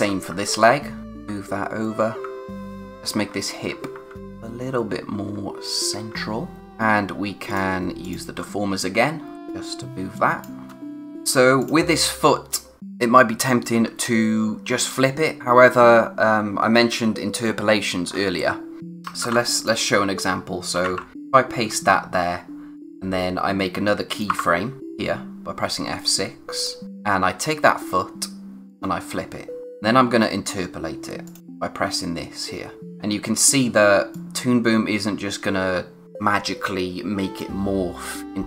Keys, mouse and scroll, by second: 0.0-0.3 typing, 1.0 Right, 8.4-9.3 scroll up 1, 9.3 click, 10.7 space, 10.9 click, 11.4 space, 11.6 click, 16.7-17.7 scroll down 1, 18.8 click, 19.2 ctrl+c, 19.6 click, 21.7-22.8 scroll down 1, 22.8 click, 24.3 F6, 26.6 click, 28.7 click, 32.8 click, 33.0-33.3 scroll up 1, 34.1 click.